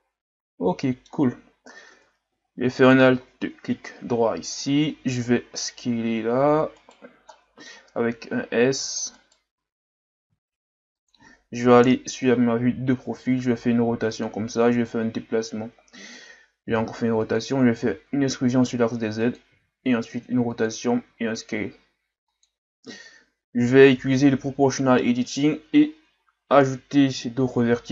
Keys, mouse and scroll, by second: 1.9 Tab, 2.8 alt+right click, 3.8 KP_3, 4.6-5.4 scroll up 4, 5.5 r, 7.3 middle click, 8.0 s, 9.5 s, 11.7 KP_3, 13.2 r, 14.9 click, 16.7 r, 17.8 e, 19.6 r, 21.0 s, 24.4 o, 26.1 ctrl+KP_Add, 27.3 ctrl+KP_Add.